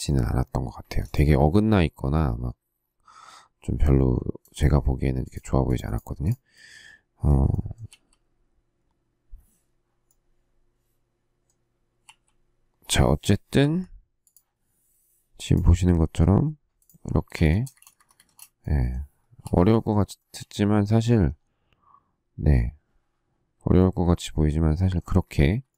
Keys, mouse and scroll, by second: 0.5 space, 0.7 Escape, 7.8 q, 12.0 q, 17.2 space, 17.3 Escape, 17.9 Escape, 18.2 space, 19.4 k, 20.1 shift+middle click, 25.6 shift+middle click.